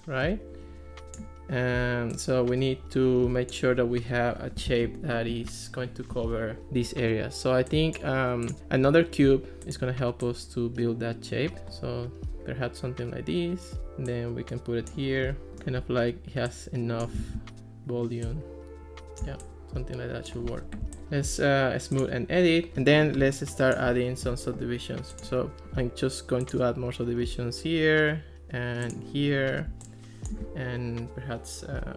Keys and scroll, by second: 4.7 ctrl+x, 17.2 super+z, 25.6 super+z.